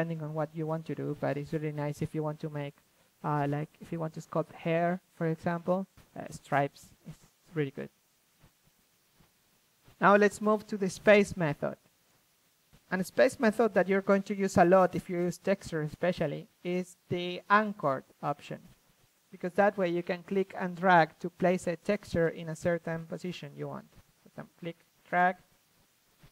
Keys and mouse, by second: 2.5-2.9 middle drag, 2.9 ctrl+z, 3.6-4.0 drag, 4.0 middle drag, 5.2 ctrl+z, 6.1 f, 6.5-7.8 drag, 7.0 f, 9.0-9.4 drag, 9.2 ctrl+z, 9.7-10.7 drag, 10.3 ctrl+z, 12.2 click, 12.6-13.8 drag, 13.7 a, 15.0-16.5 drag, 17.6-19.1 drag, 22.0-25.4 middle drag, 24.3 ctrl+z, 25.4 shift+f.